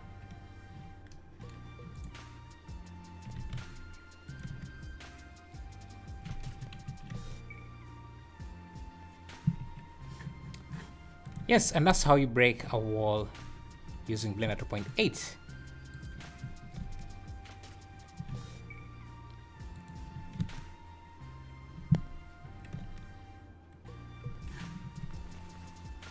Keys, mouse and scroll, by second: 1.9 click, 3.3 g, 4.5 space, 6.5 Escape, 7.1 space, 7.1 `, 9.6 Escape, 11.2 click, 11.4 space, 13.0 scroll down 3, 15.0 Escape, 16.0 click, 16.6 `, 16.8 space, 18.3 Escape, 19.7 click, 20.1 `, 20.4 space, 22.4 Escape, 22.8 space, 24.2 Escape.